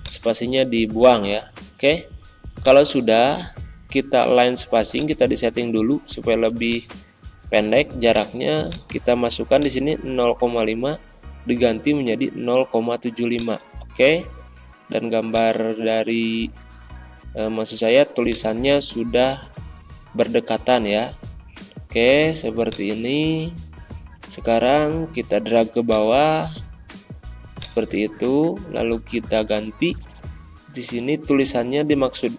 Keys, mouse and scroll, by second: 0.5 ctrl+a, 2.5 click, 4.9 click, 9.8 ], 13.3-17.0 drag, 17.0 ctrl+scroll down 1, 18.2-20.1 drag, 20.1 ctrl+scroll down 1, 22.6-25.8 drag, 25.8-27.5 ctrl+drag, 27.9 ctrl+a, 29.0 Pause, 30.9 alt+Tab.